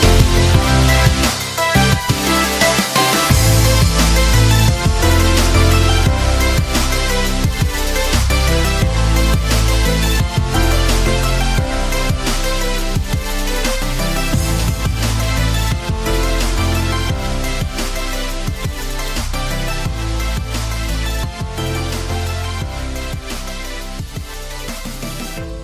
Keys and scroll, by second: 2.7 F4, 3.4 F9.